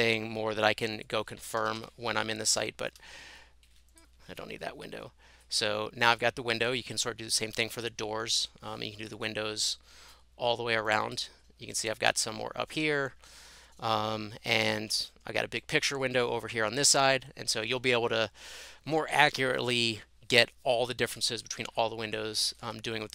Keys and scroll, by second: 1.6 typing, 4.5 Delete.